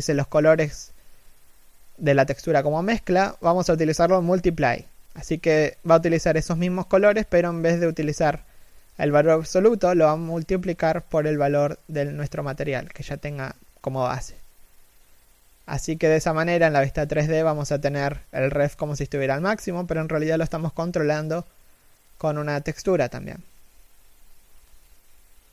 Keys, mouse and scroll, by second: 20.0 middle click, 22.0 scroll up 1, 23.6 alt+right click, 25.4 g.